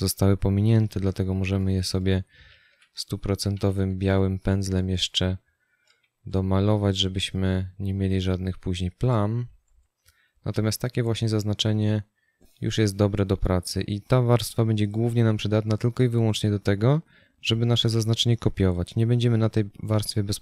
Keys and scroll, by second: 1.3 b, 3.9 x.